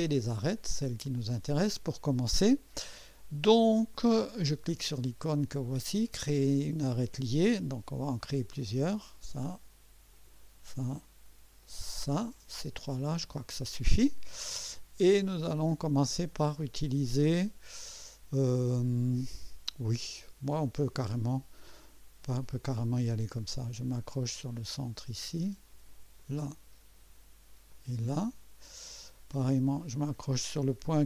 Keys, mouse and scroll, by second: 0.1 right click, 0.7 scroll up 1, 1.2 right click, 6.5 click, 8.5 click, 10.1 click, 11.6 click, 22.2 click, 24.5 click, 26.2 click, 27.7 click.